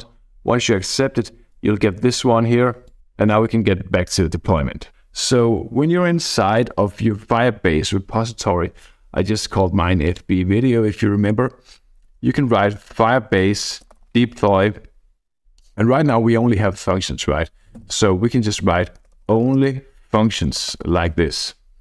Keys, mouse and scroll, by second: 2.9 click, 3.0-3.6 scroll up 1, 4.3-4.9 scroll down 2, 4.9 click, 9.3-10.5 scroll up 1, 12.5-14.9 typing, 17.8-21.4 typing.